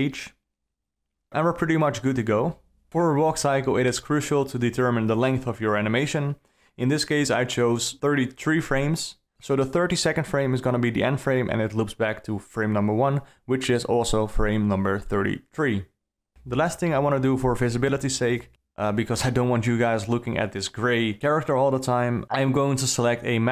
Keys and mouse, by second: 3.4-5.3 drag, 4.6 KP_3, 6.4 shift+Left, 8.1-8.8 middle drag, 10.6 KP_3, 11.0 KP_9, 17.0-23.5 drag.